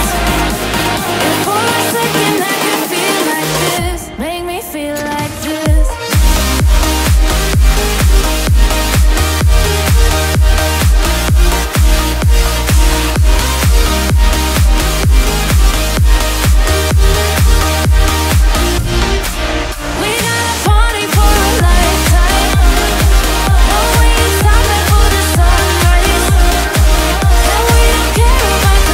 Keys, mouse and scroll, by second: 7.6 right click, 16.8 right click, 21.3 ctrl+z, 23.3 ctrl+z, 23.5 ctrl+z, 24.0 ctrl+z, 25.2 ctrl++, 25.3 right click, 26.1 ctrl+z.